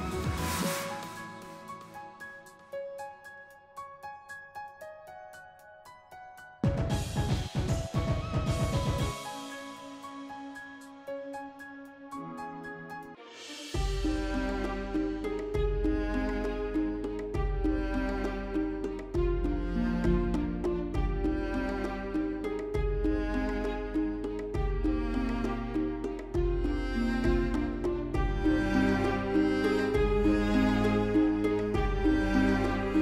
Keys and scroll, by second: 0.1 s, 8.3-9.9 typing.